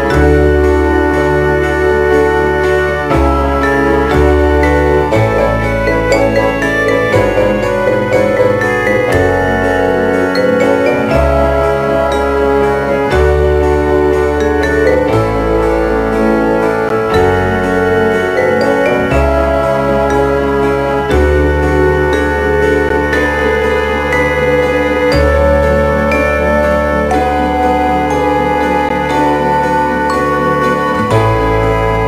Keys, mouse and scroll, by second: 0.4 right click, 1.4 r, 2.8 right click, 4.5 ctrl+Tab, 8.6 r, 11.6 right click, 13.4 right click, 13.8 r, 19.0 right click, 20.2 right click, 20.7 r, 22.1 right click, 25.9 right click, 29.0 click, 30.2 click.